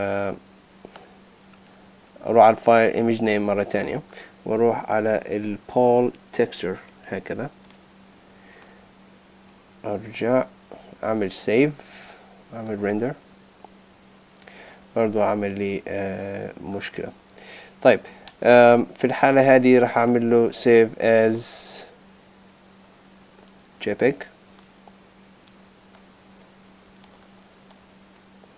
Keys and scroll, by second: 11.5 super+s, 21.1 shift+super+s, 27.0 super+Tab.